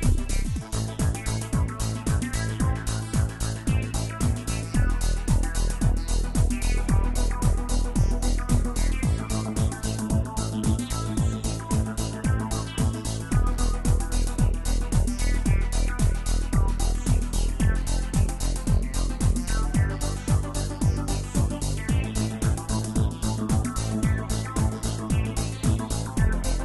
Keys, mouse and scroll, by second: 0.0 space, 14.7 space, 15.0-16.6 middle drag, 16.6 KP_0, 17.7 space, 21.9 space, 23.1 click, 24.9-26.6 drag.